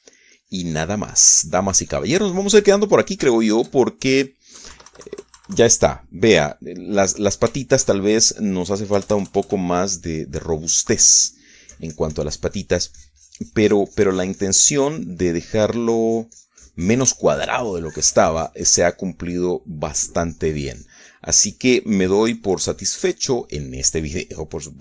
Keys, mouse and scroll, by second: 0.4 middle click, 1.7 f, 2.0-5.2 drag, 5.2 shift+middle click, 6.4 KP_Subtract, 7.8-10.3 middle drag, 10.8 KP_Add, 11.7 middle click, 12.4-17.0 drag, 17.1 middle click, 17.7-19.4 drag, 19.4 shift+middle click, 19.5-21.6 shift+drag, 22.1-24.8 drag.